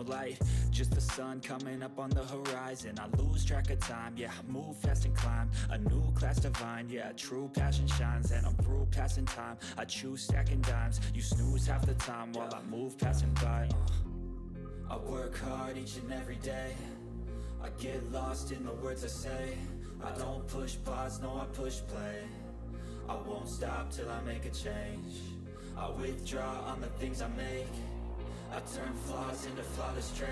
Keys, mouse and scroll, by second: 0.0-0.4 typing, 1.5 typing, 2.8-4.3 typing, 4.9 click, 5.3 ctrl+s, 8.8 ctrl+s, 8.8-10.9 typing, 15.4 click, 19.0 click, 24.3 click, 24.3 click, 25.2-26.5 scroll up 1, 26.7-28.3 drag, 28.3-30.3 drag.